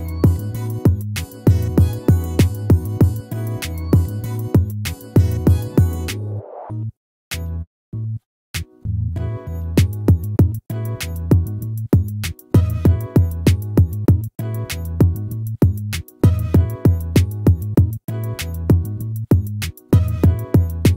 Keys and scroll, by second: 4.4 ctrl++, 8.7 ctrl++.